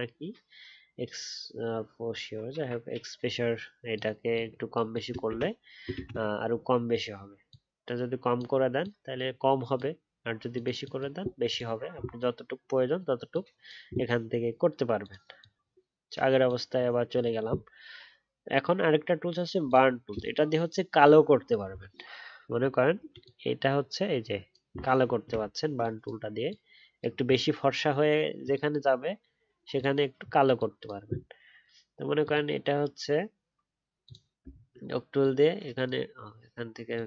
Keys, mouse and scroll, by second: 5.3 ctrl+z, 5.9 ctrl+z, 25.3-29.6 alt+scroll up 1, 34.4 alt+scroll down 1.